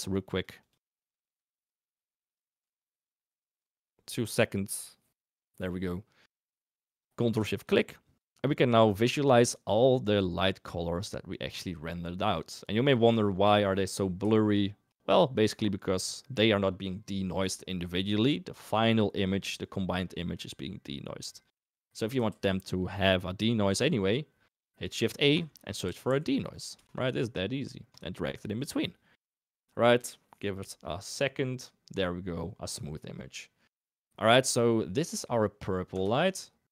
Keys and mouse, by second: 0.2 click, 7.7 ctrl+shift+click, 8.5 ctrl+shift+click, 9.5 ctrl+shift+click, 9.8 ctrl+shift+click, 10.0 ctrl+shift+click, 10.5 ctrl+shift+click, 12.6-13.7 drag, 14.9 click, 21.2 middle click, 22.2 shift+a, 36.2 ctrl+shift+click.